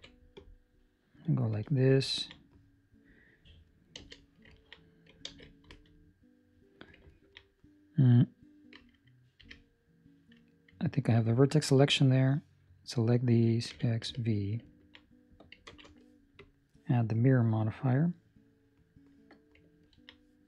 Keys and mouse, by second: 1.5 Escape, 2.0 ctrl+middle click, 3.9 z, 4.5 ctrl+middle click, 5.2 alt+a, 5.6 Escape, 7.1 ctrl+middle click, 11.2 1, 11.3 ctrl+middle click, 12.0 click, 13.6 x, 14.6 ctrl+middle click, 15.6 ctrl+space, 16.3 click, 19.8 ctrl+middle click.